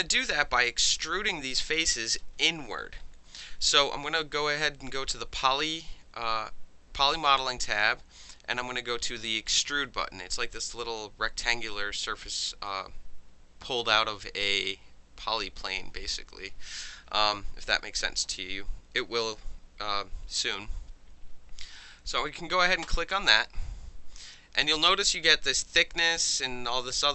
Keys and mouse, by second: 2.0 alt+drag, 2.3 middle click, 3.3-3.6 middle drag, 16.4-22.8 middle drag, 22.8 click, 24.9-25.2 alt+drag.